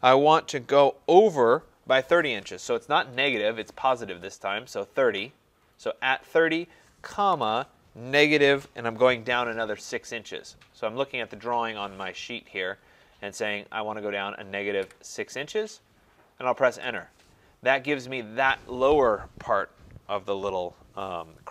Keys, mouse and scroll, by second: 3.1 typing, 5.0 typing, 7.1-8.2 typing, 14.8 typing, 16.8 Return.